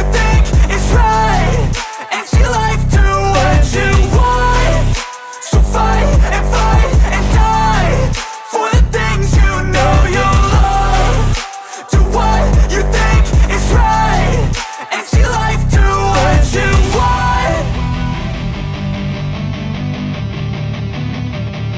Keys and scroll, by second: 0.0-0.9 typing, 1.3 Return, 1.8 shift+Return, 1.9 shift+9, 2.8 ctrl+z, 3.8 BackSpace, 4.7 shift+9, 5.0 ctrl+s.